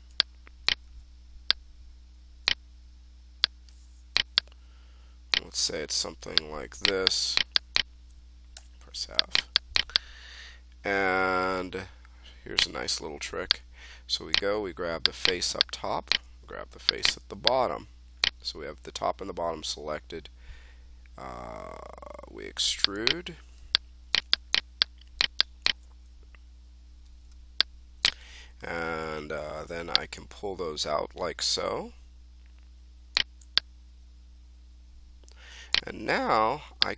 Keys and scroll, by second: 8.5 f.